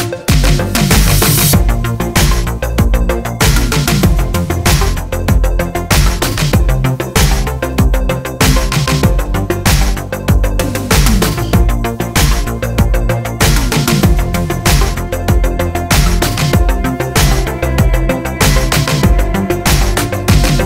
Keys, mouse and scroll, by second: 2.7 click, 3.0-7.1 middle drag, 3.6-5.6 scroll up 2, 7.1 click, 7.2 r, 8.4 click, 8.8 alt+d, 10.9 click, 11.2 g, 12.0 click, 12.2 click, 12.6 g, 16.2-17.2 middle drag, 17.2 click, 17.7-19.7 middle drag, 18.1 alt+d, 19.7 click, 19.8 r, 20.6 click.